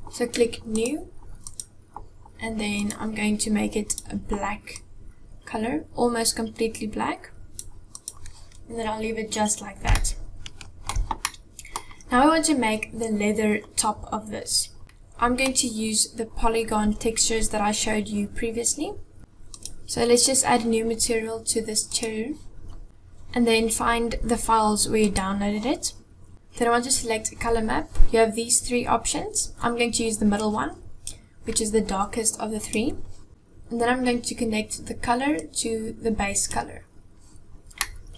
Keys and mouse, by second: 0.6 click, 1.3-2.7 drag, 3.7 click, 7.8 click, 9.8-10.7 shift+drag, 11.1 click, 14.8 middle click, 19.2 click, 21.6 click, 22.8 click, 35.1-36.3 drag, 37.6-38.1 middle drag.